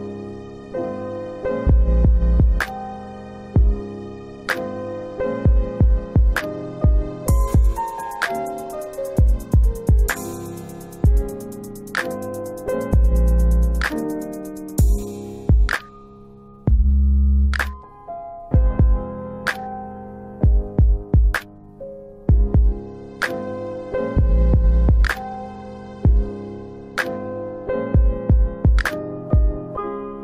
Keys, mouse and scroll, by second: 1.2 click, 2.0 alt+click, 2.9 click, 4.4 click, 7.7 w, 9.3 click, 12.5 click, 14.0 middle click, 14.1-14.8 scroll down 2, 14.8 middle click, 15.6 alt+w, 16.2 alt+w, 16.8 alt+middle click, 17.3 alt+w, 18.9 alt+w, 19.6-20.3 scroll down 2, 20.3 middle click, 21.5 click, 23.8 click, 24.8-25.4 scroll down 3, 25.4 middle click, 28.7 click.